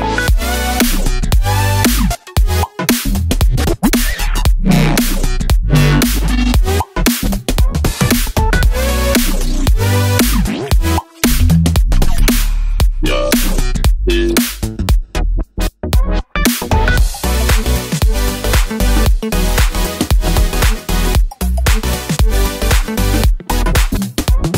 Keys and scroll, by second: 6.8 super+c, 6.9 super+d, 13.0 super+d.